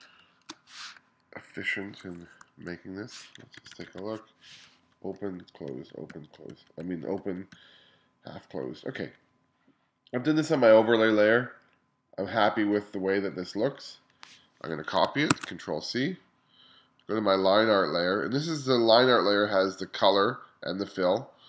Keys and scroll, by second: 3.6 1, 4.7-7.6 typing, 8.7 [, 9.0 ], 15.4 super+c.